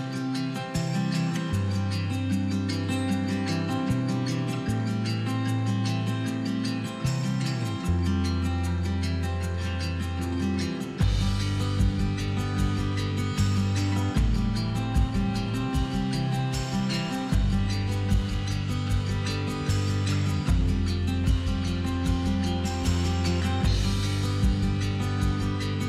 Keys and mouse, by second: 0.0 click, 0.9 z, 1.5-2.0 right drag, 2.0 middle click, 2.1 right drag, 2.3 z, 2.5 z, 2.9-3.9 right drag, 4.2-6.4 typing, 4.9 click, 5.7 click, 7.8 click, 8.7-11.5 typing, 10.6 click, 11.4 click, 13.3 click, 13.4-15.9 typing, 16.9-18.9 typing, 19.8 middle click, 20.6 middle click, 21.3 l, 21.9 z, 22.8 middle click, 23.7 z, 24.4 z.